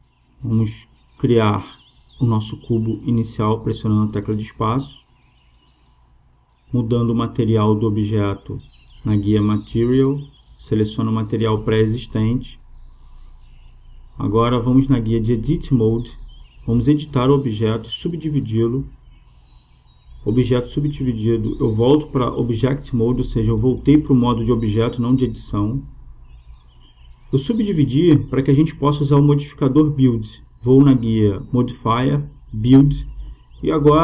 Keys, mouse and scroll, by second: 1.3 space, 6.4-8.2 drag, 10.8 click, 14.2-16.0 drag, 17.2-19.8 drag, 21.0-22.7 drag, 30.4-32.6 drag.